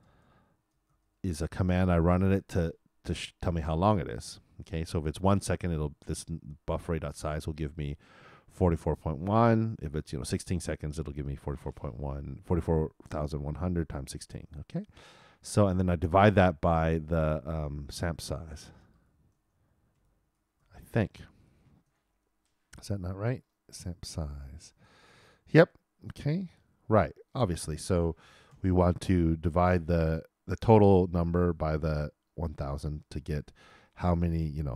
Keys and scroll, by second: 21.4 shift+e, 21.8 shift+0, 28.5 shift+9.